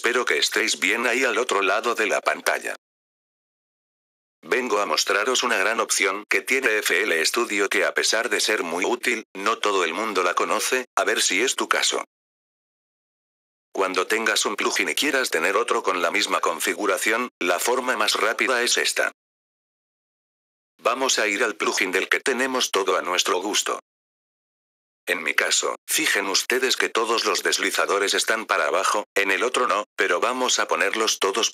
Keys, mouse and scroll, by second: 0.8 click, 2.8 click, 4.0 click, 5.1 click, 6.5 click, 7.7 click, 8.9 click, 10.1 click, 10.8 click, 11.8 click, 12.6 click, 13.7 click, 14.5 click, 15.2 click, 16.2 click, 17.4 click, 18.4 click, 19.4 click, 21.3 click, 22.5 click, 25.8 click, 26.5 click, 28.8 +, 30.4 click.